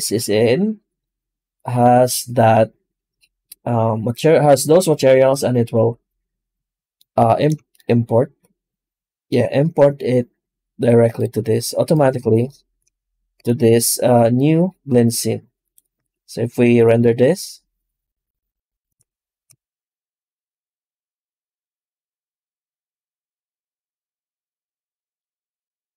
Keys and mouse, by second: 8.4-20.3 shift+middle drag, 20.3-22.5 drag, 22.5-23.8 drag.